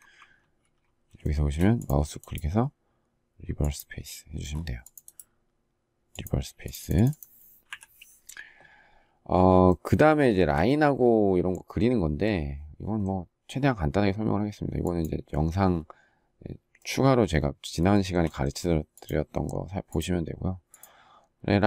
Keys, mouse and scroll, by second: 0.1 ctrl+z, 1.0 shift+middle click, 7.5 Delete, 10.0 shift+middle click, 17.7 shift+middle click.